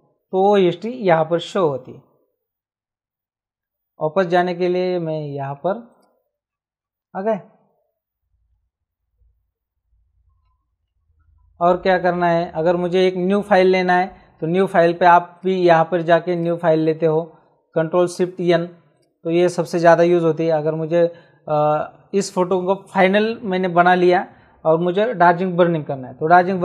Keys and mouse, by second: 5.9 click, 10.4 shift+Tab, 15.3 click, 18.9 click.